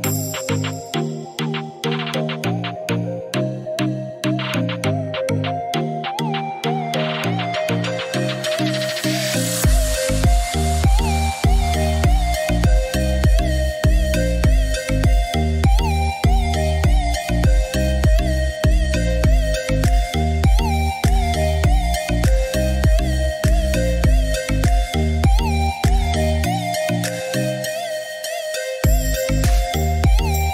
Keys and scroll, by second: 15.3 4, 15.7 0, 16.3 Return.